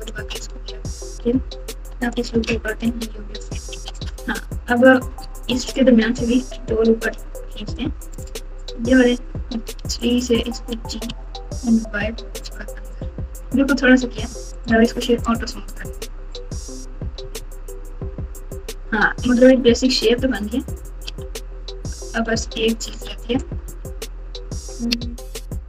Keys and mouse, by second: 1.2 f, 2.8 f, 3.7 alt+z, 6.3 ctrl+r, 9.7 3, 10.0 click, 10.7 g, 13.2 Tab, 17.0 KP_6, 17.1 KP_6, 17.3 KP_6, 17.5 KP_6, 17.9 Tab, 18.3 Tab, 19.3 KP_7, 22.9 alt+z, 23.6 Tab.